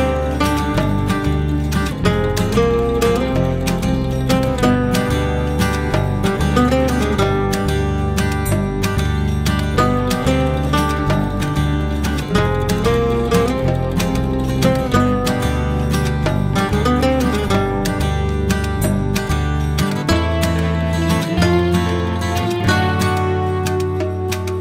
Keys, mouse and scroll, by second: 4.5 click, 6.0-8.8 drag, 8.8 0, 13.2 click, 15.1 s, 18.4 g.